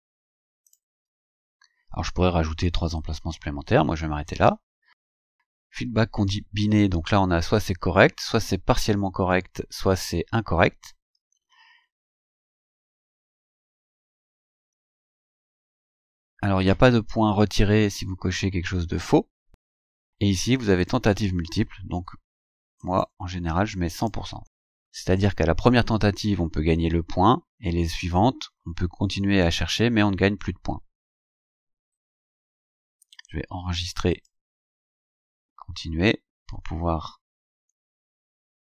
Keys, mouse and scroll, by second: 0.7 click, 5.1 click, 7.2 scroll down 1, 7.9 scroll down 2, 9.2-9.5 scroll down 2, 17.7 scroll up 2, 19.7-20.1 scroll down 2, 20.9 click, 21.4-22.9 scroll down 2, 22.9 click, 24.0 click, 31.0 scroll down 2, 31.6 scroll down 2, 34.2 click, 37.5-38.6 scroll down 12.